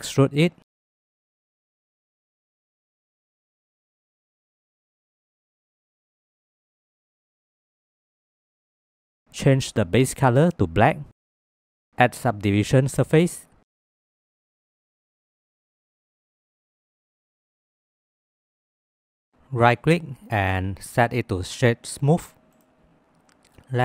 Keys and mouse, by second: 0.2 e, 2.2 Tab, 8.6 click, 9.6 click, 12.3 click, 13.1-14.7 drag, 16.5 click, 18.4-19.2 middle drag.